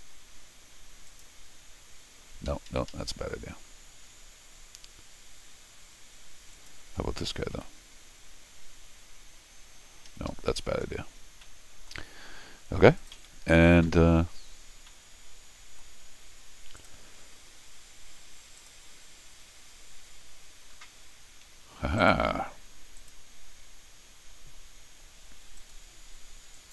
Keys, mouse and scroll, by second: 1.1 click, 2.5 Escape, 2.7 Escape, 2.9 Escape, 6.5 click, 7.5 u, 10.1 Escape, 10.3 Escape, 10.9 scroll down 2, 11.4 middle click, 12.3 scroll down 2, 13.0 click, 13.2 s, 14.9 middle click, 16.8 click, 18.6 click, 22.0 right click, 23.0 click, 25.6 click, 26.5 click.